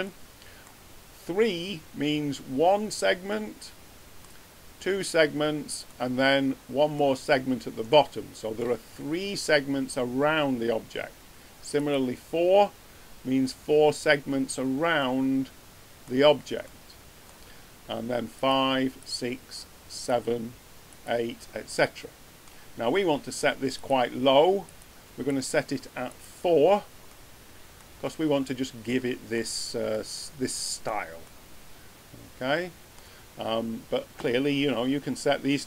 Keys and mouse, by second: 0.0-0.9 drag, 1.6 middle drag, 3.7 click, 3.9 click, 4.0 click, 8.0 middle drag, 8.2 middle click, 8.4 middle click, 15.0 middle click, 15.3 middle click, 15.5 middle click, 15.7 middle click, 16.7 middle click, 29.9-30.5 middle drag, 32.1 middle click, 32.3 middle click.